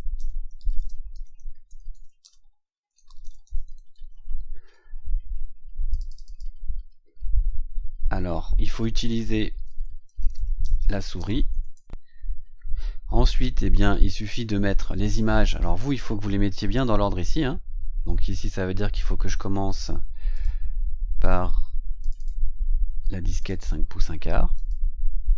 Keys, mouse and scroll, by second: 0.0-4.5 typing, 5.8 click, 8.9-12.0 typing, 12.9-13.2 scroll down 2, 18.4 click, 20.3 click, 21.9 click, 23.3 click, 24.5 click.